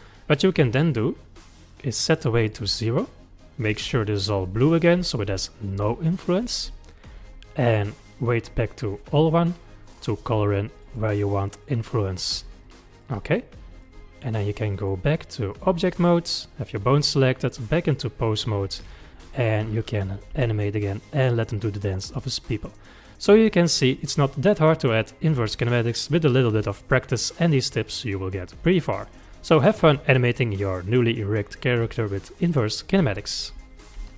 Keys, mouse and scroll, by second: 2.0-4.4 drag, 4.4 middle click, 5.0 click, 5.3 middle click, 6.0 click, 6.7-7.7 middle drag, 7.7-9.0 drag, 9.0-10.5 middle drag, 10.5 click, 11.0-12.6 middle drag, 12.6 click, 13.2-14.4 middle drag, 14.4 click, 15.1-16.0 drag, 16.6 click, 17.4-18.2 drag, 18.2-20.0 middle drag, 20.0 click, 20.3 g, 24.2-27.3 middle drag, 28.5-31.5 middle drag.